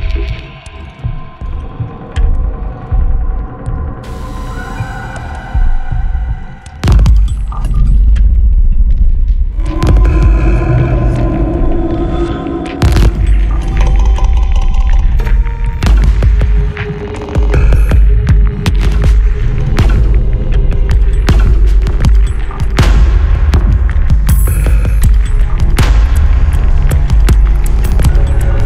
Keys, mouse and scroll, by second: 3.3 click, 9.0 scroll up 2, 10.5 click, 11.0 scroll down 1, 12.8 click, 14.8 click, 16.2-16.6 scroll down 2, 18.6 click, 19.8-20.1 scroll up 2, 20.1 middle click, 21.0 click, 22.4 click, 24.1 click, 25.2-25.6 scroll down 1, 26.4 click, 27.4-27.7 scroll up 2.